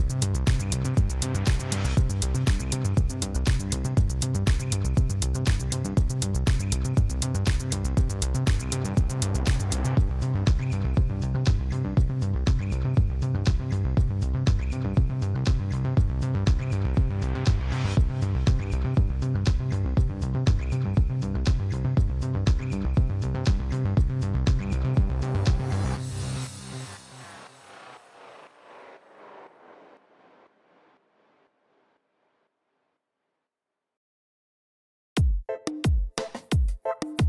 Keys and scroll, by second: 0.4 ctrl+b, 0.5 ., 0.6 0, 0.9 Return, 1.1 Tab, 2.7 alt+a, 6.9 Tab, 7.6 a, 10.6 2, 12.0 f, 13.6 3, 14.4 i, 15.7 g, 15.9 z, 18.3 i, 20.5 i, 24.8 i, 29.8 Tab, 31.9-33.9 typing, 34.4 Return.